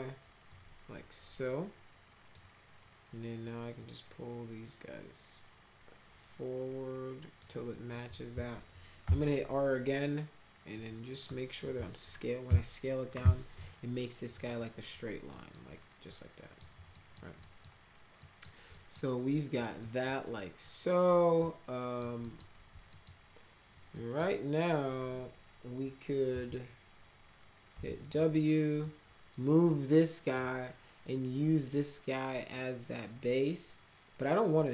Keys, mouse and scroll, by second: 0.5-2.3 drag, 3.7-7.3 drag, 7.7 middle click, 8.0-8.4 scroll up 2, 9.0 r, 10.7-13.5 drag, 14.3 click, 15.3 middle click, 16.0-16.5 drag, 16.9 middle click, 17.4 middle click, 18.2 middle click, 18.7 middle click, 19.8 middle click, 21.4-21.9 drag, 22.2 middle click, 22.9 middle click, 23.9 drag, 26.2 e, 27.7 w, 28.8-30.3 drag.